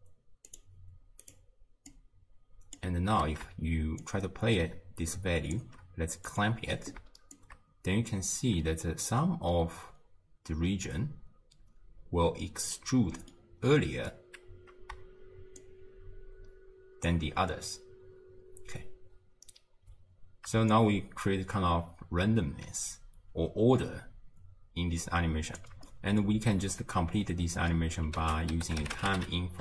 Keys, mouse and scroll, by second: 0.5 click, 1.9 drag, 4.0-6.4 shift+drag, 7.4-10.4 shift+drag, 13.3-15.6 middle drag, 15.6-18.7 shift+drag, 19.4-20.0 scroll down 1, 20.0-20.7 scroll down 2, 20.7-23.8 shift+drag, 25.9-27.4 middle drag, 27.4 scroll up 1, 27.7 middle click, 28.2 ctrl+a.